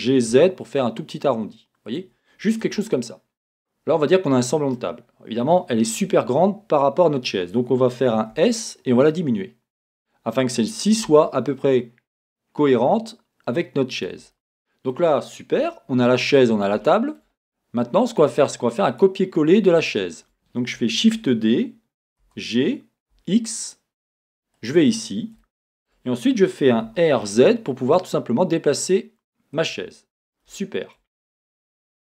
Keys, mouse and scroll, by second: 2.0 click, 2.7 Tab, 3.0-10.0 middle drag, 5.1-6.0 scroll down 2, 6.0 scroll down 1, 6.0 KP_1, 8.3 s, 10.0 click, 11.1 g, 14.1 click, 14.3-18.1 middle drag, 17.3-18.1 scroll up 1, 18.2 click, 18.9 click, 19.4-19.8 scroll down 1, 21.1-24.7 middle drag, 21.1 shift+d, 24.7 click, 25.4-29.7 shift+middle drag, 26.8 r, 29.7 click, 30.6-32.1 shift+middle drag, 31.1 scroll.